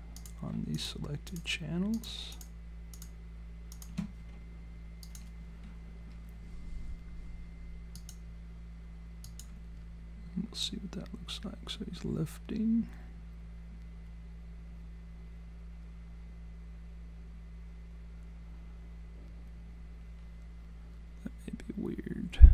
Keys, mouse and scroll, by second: 0.2 click, 0.8 shift+click, 3.2 click, 5.1 shift+click, 10.6 click.